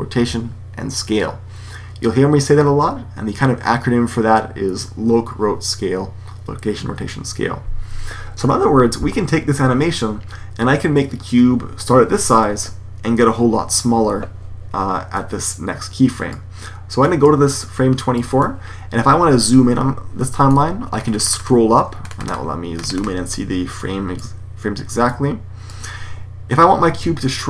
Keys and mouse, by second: 15.2 click, 18.3 click, 18.8-20.3 middle drag, 20.8-24.9 middle drag, 24.9-26.7 drag.